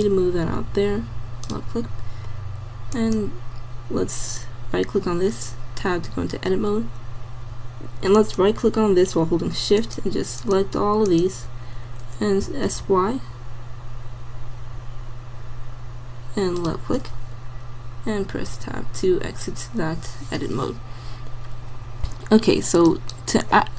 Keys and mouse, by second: 2.2-4.7 drag, 5.9 Tab, 5.9-9.7 drag, 12.5 s, 17.4-18.6 middle drag, 18.6 Tab, 22.9-23.7 drag.